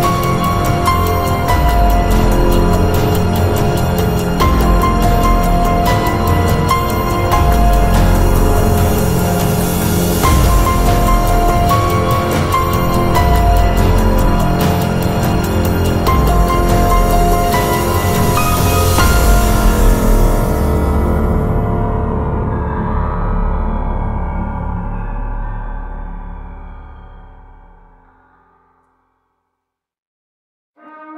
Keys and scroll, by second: 3.5 Escape, 6.4 Escape, 7.3 ctrl+a, 20.6 Escape, 22.7 ctrl+a.